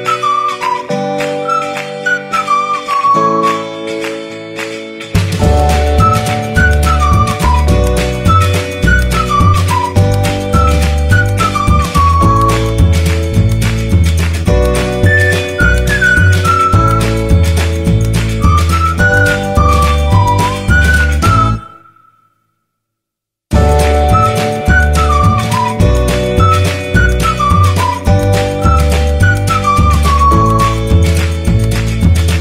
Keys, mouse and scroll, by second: 31.5 click.